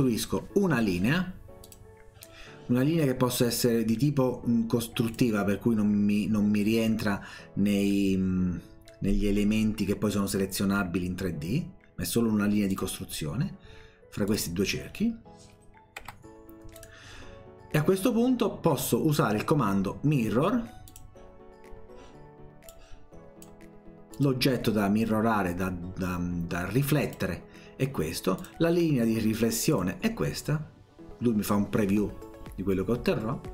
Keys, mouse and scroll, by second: 1.6 click, 5.1 click, 12.7 click, 14.3 click, 16.1 Escape, 16.8 click, 20.9 click, 22.7 click, 24.2 click, 27.1 click, 28.4 click, 29.7 click.